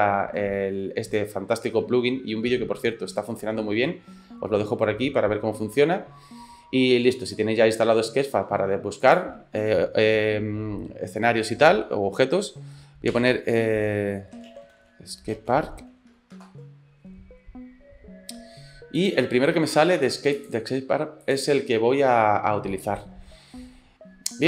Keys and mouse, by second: 9.0-18.1 drag, 19.1-20.5 drag, 21.3-23.9 drag.